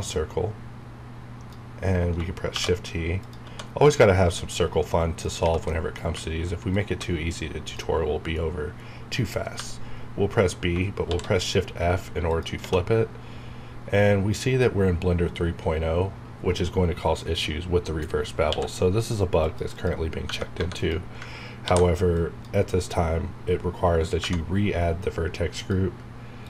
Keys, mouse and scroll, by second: 2.5 shift+t, 3.2 click, 5.7 middle click, 6.7-9.6 ctrl+drag, 9.6 b, 11.1 shift+f, 12.3 click, 13.3 scroll up 1, 18.5 q, 19.7 click, 20.3 Tab, 20.5 3, 20.7 click, 21.6 ctrl+g, 22.1 click, 24.2 Tab, 24.2 Right, 25.6 click.